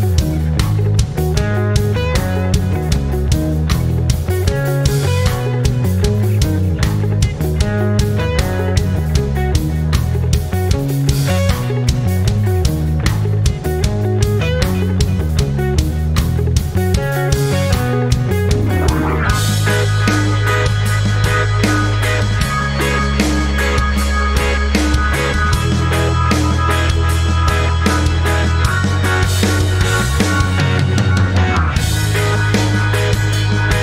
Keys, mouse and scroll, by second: 3.8 click, 4.7 i, 5.1 Return, 6.2 click, 8.7 t, 8.8 Return, 10.0 click, 14.5 click, 16.3 c, 16.6 Return, 17.8-20.4 drag, 21.1 ctrl+scroll up 1, 22.8 r, 25.4 b, 26.7 ctrl+z, 28.0 Escape, 29.0 p, 30.3 click, 33.6 click.